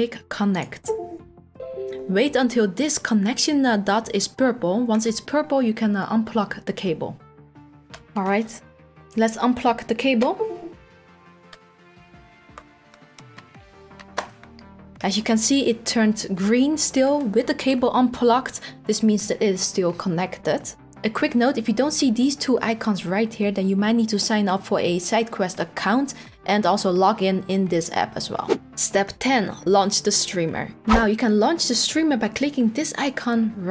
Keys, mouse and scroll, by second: 0.6 click, 33.0 click.